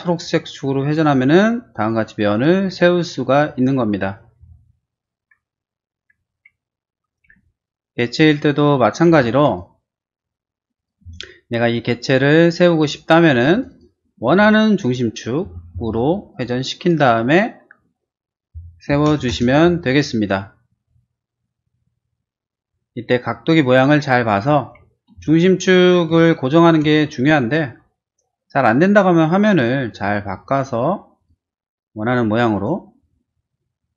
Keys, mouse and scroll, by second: 0.0 click, 0.9 click, 2.7 click, 6.1 ctrl+z, 7.2 p, 8.1 click, 9.2 ctrl+z, 9.4 click, 10.7 click, 11.0 space, 13.3 click, 13.5 click, 13.7 click, 14.1 q, 15.6 Right, 15.7 Left, 16.3 click, 17.0 click, 18.6-19.6 typing, 24.4 ctrl+z, 25.1 space, 26.3 middle click, 27.4-28.6 shift+middle drag, 29.3 middle click, 29.9 q, 30.4 click, 31.1 click, 32.5 click, 33.0 middle click.